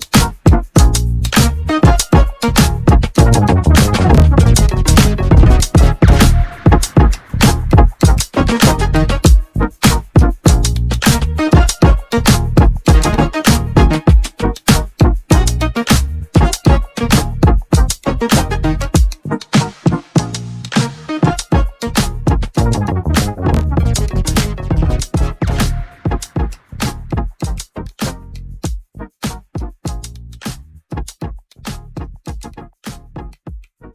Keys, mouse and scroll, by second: 0.4 `, 1.3 click, 2.3 Tab, 2.7 click, 3.5 3, 3.8 click, 4.5 middle click, 6.9 shift+d, 8.1 p, 8.7 p, 9.7 s, 10.9 Tab, 11.5 click, 13.1 s, 16.9 g, 19.0 scroll up 1, 19.1-19.7 middle drag, 20.6-21.5 scroll up 4, 21.5 scroll down 1, 22.8 g, 24.9-27.1 drag, 27.1-29.6 middle drag, 30.8-32.6 scroll down 1, 32.6 g.